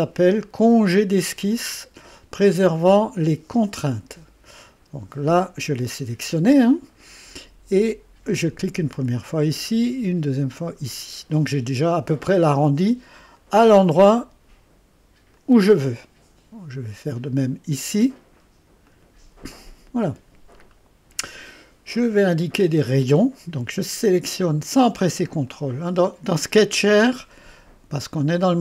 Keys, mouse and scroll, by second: 3.6 click, 9.0 click, 9.4 click, 10.6 click, 13.4 click, 15.3 click, 17.4 click, 18.9 click, 20.7 right click, 23.0 click, 25.5 click.